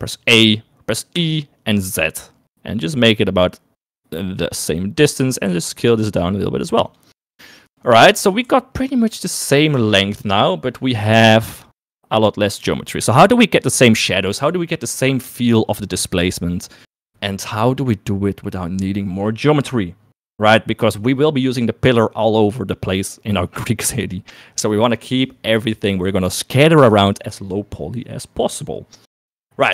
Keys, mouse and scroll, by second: 0.3 a, 1.2 e, 5.5 s, 7.6 shift+middle click, 9.8 Tab.